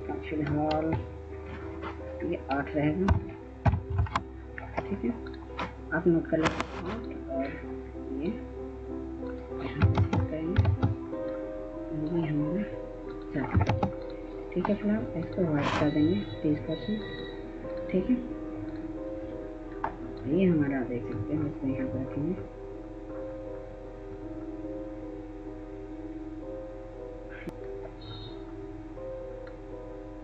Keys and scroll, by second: 2.7 ctrl+a, 2.8 BackSpace, 3.4 8, 3.7 Return, 9.7 ctrl+space, 10.4 ctrl+space.